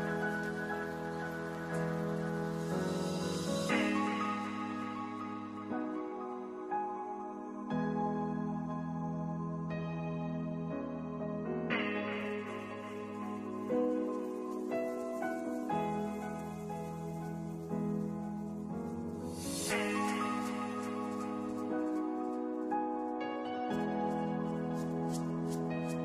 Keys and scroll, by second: 4.9 ctrl+shift+h, 6.6 v.